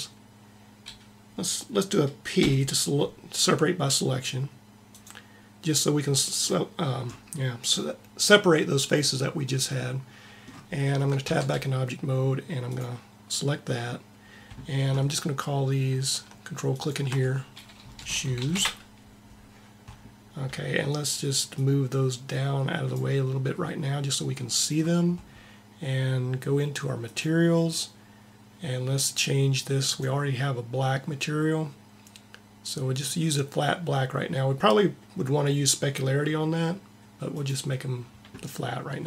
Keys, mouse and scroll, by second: 2.3 p, 5.0 p, 6.3-8.8 middle drag, 11.2 Tab, 16.6-18.2 drag, 21.5-22.9 right drag, 26.9-28.8 drag, 29.8-31.4 drag.